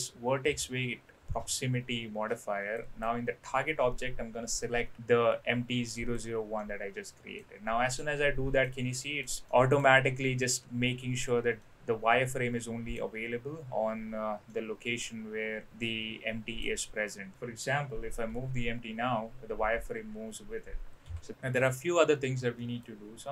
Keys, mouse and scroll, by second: 2.8-6.2 drag, 6.6-7.4 middle drag, 8.0-8.6 middle drag, 8.9-9.2 middle drag, 9.5-9.8 middle drag, 11.5-12.9 middle drag, 14.5-16.6 middle drag, 18.3 g, 22.6 middle click.